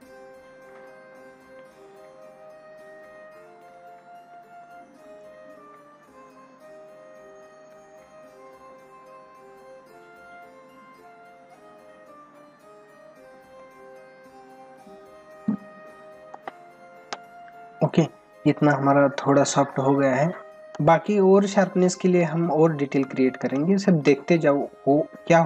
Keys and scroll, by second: 16.3 space, 18.1 ctrl+=, 19.8 ctrl+=, 20.7 space, 22.9 ctrl+=, 24.5 ].